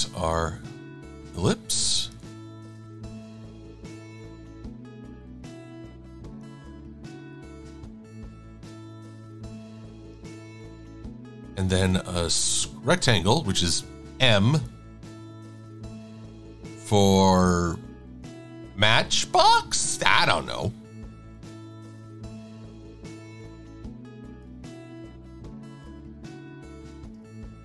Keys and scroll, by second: 2.3 e, 17.1 v, 22.5 super+z, 24.9 e.